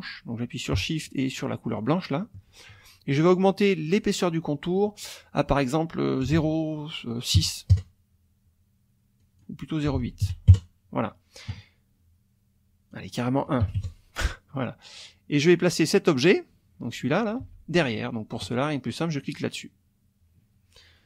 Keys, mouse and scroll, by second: 1.8 shift+click, 3.9 click, 4.8 click, 6.2 KP_0, 6.3 KP_Decimal, 7.4 KP_6, 7.7 KP_Enter, 9.2 click, 9.9 KP_0, 10.0 KP_Decimal, 10.2 KP_8, 10.5 KP_Enter, 12.9 click, 13.6 KP_1, 13.7 KP_Enter, 15.4 click, 16.4-17.4 drag, 17.4 ctrl+z, 19.3 click.